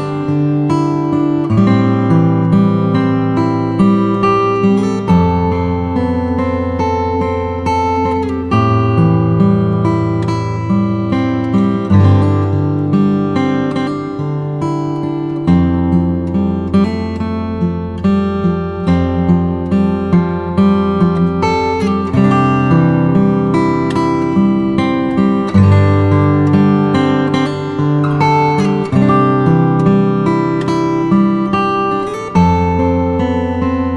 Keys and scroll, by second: 6.6 v.